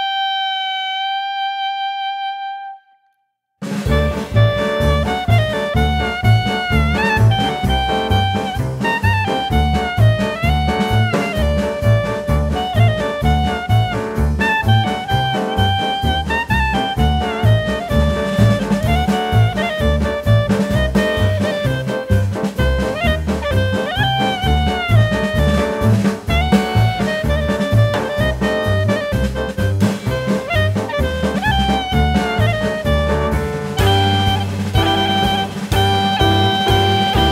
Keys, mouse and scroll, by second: 3.6 ctrl+c, 4.0 ctrl+v, 4.7 click, 6.0 click, 6.9 click, 7.4 click, 7.9 Tab, 8.1 click, 8.7-9.2 scroll up 1, 9.2 click, 16.1 scroll up 1, 16.3 middle click, 16.9 scroll down 1, 17.1 middle click, 17.6 click, 18.2 click, 19.4 click, 21.6 click, 22.2 click, 24.0 click, 25.7 a, 26.6 click, 28.4 click, 28.8 click, 29.3 click, 29.9 shift+click, 30.8 click, 31.3 middle click, 31.9 shift+click, 33.4 click, 33.7 scroll up 1, 35.1 ctrl+b.